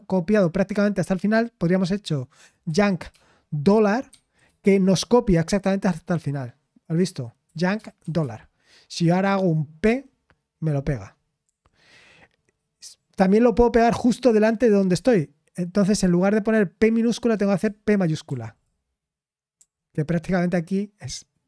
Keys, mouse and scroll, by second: 13.9 typing.